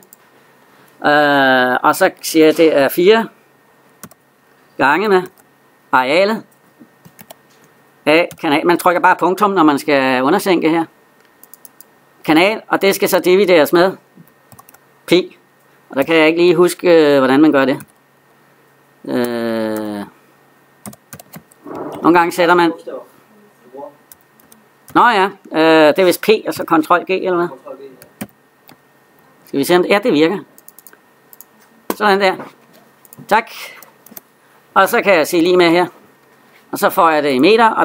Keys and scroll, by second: 19.0 BackSpace, 23.8 BackSpace, 24.4 BackSpace, 28.0 ctrl+g.